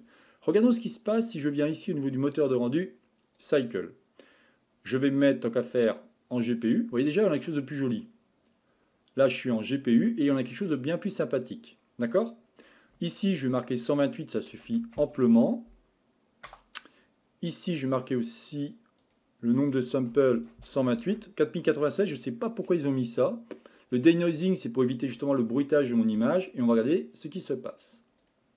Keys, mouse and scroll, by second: 1.6-7.8 drag, 13.7-16.8 drag, 19.0-22.2 drag, 24.3 click, 27.3-28.5 drag.